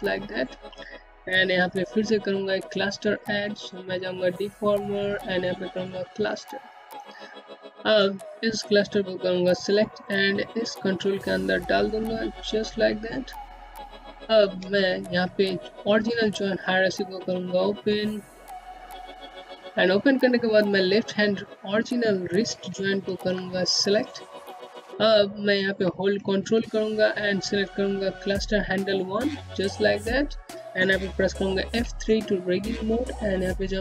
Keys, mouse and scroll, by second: 1.9 click, 7.8 click, 9.8 middle click, 16.3 click, 18.9-19.3 scroll down 1, 20.7 ctrl+Num_Lock, 21.4 click, 22.0-23.4 scroll down 1, 26.9 click, 30.6 F3, 31.7 click.